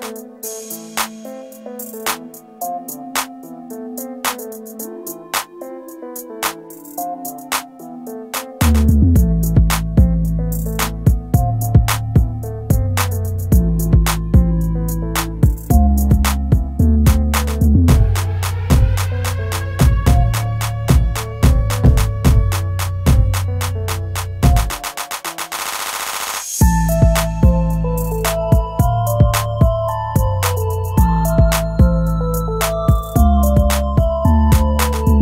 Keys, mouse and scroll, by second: 5.0 scroll up 1, 10.4 shift+click, 11.4 shift+click, 11.9 typing, 12.5 Escape, 19.1 shift+F11, 22.2-24.5 typing, 23.2 Tab.